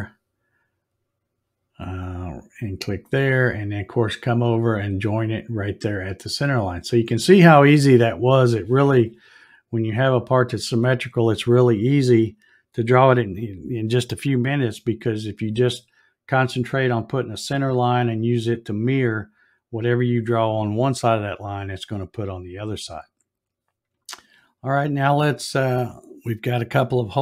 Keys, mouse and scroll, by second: 2.2 click, 5.8 click, 10.0 click.